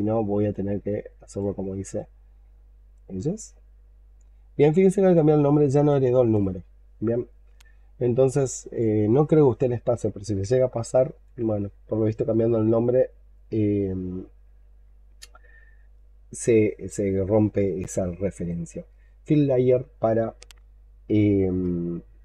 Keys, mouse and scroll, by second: 8.8 scroll up 1, 9.0-10.3 scroll down 4, 10.4 alt+click.